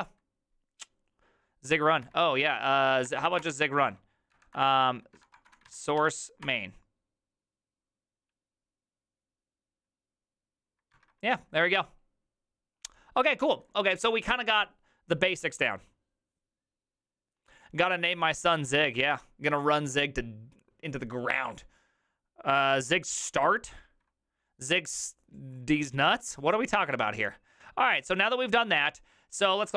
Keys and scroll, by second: 2.1 alt+{, 2.5-6.9 typing, 4.3 Up, 10.9 alt++.